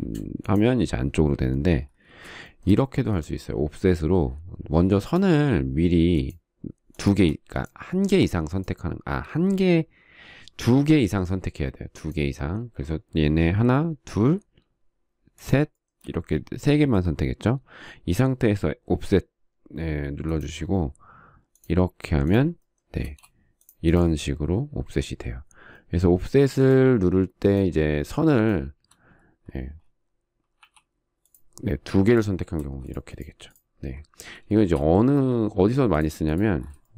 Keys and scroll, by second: 2.8 space, 23.7 space, 31.3 f, 33.3 space, 33.3 space.